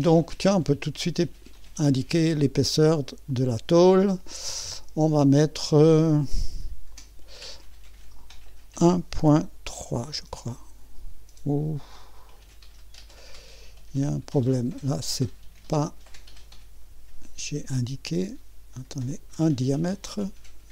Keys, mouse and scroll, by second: 1.5 click, 3.3 click, 6.9 click, 9.2 ., 9.8 3, 10.1 Return, 15.8 click, 16.8-20.7 Delete, 19.1-20.6 drag.